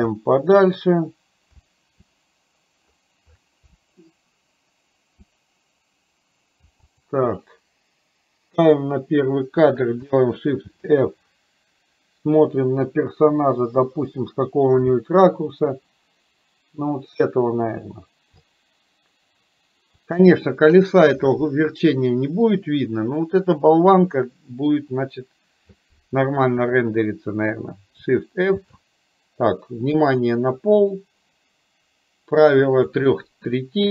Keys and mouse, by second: 8.6 click, 10.7 shift+f, 28.6 shift+f.